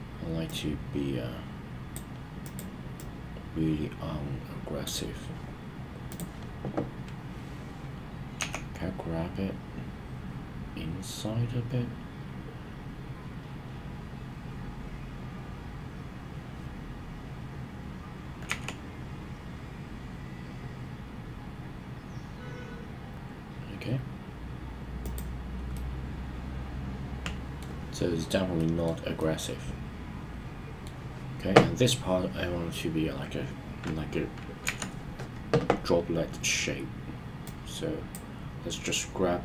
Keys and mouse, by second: 0.4 click, 0.6-1.9 drag, 2.9-4.9 drag, 8.3 g, 18.4 x, 25.0 click, 25.7-27.7 middle drag, 28.6 middle click, 29.2-30.9 middle drag, 34.6 KP_1, 37.5-38.2 drag.